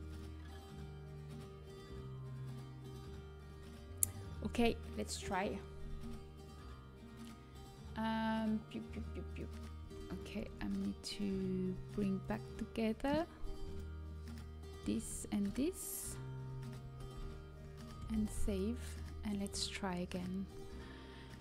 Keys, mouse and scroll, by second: 0.0-1.8 drag, 9.2-11.0 drag, 9.8 Tab, 10.3 Tab, 12.2-13.8 drag, 14.3-15.5 drag, 14.7-17.3 right drag, 17.3 ctrl+j, 18.1 ctrl+s.